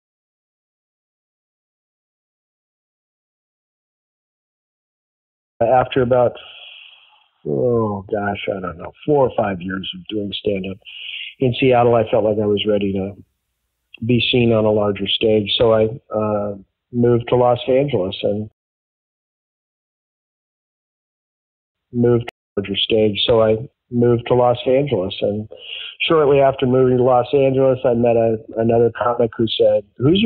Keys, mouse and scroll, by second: 5.4 click, 5.5 space, 6.6 click, 8.7-10.9 drag, 11.3 click, 12.2 click, 13.4 click, 14.5 click, 15.2 ctrl+a, 15.2 ctrl+s, 17.7 click, 18.4 space, 20.3 click, 21.4 ctrl+shift+Delete, 21.7 space, 22.2 space, 22.4 click, 22.5 space, 25.1 ctrl+s, 26.4-28.3 drag, 28.8 click, 29.8 click.